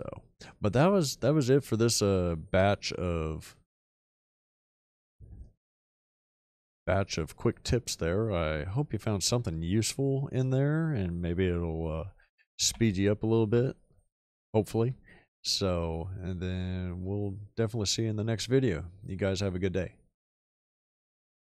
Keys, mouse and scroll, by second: 1.4 shift+middle click, 1.9 shift+middle click, 3.6 shift+click, 5.4 right click, 5.8 f, 6.7 click, 8.9 shift+middle click, 9.7 shift+middle click, 10.3 shift+middle click, 12.6 /, 13.4 ., 15.3 shift+middle click, 16.1-17.9 shift+middle drag.